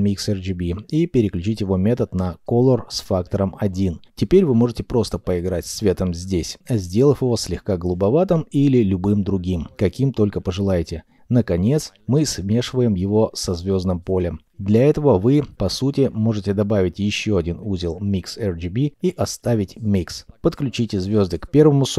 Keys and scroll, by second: 16.7 m.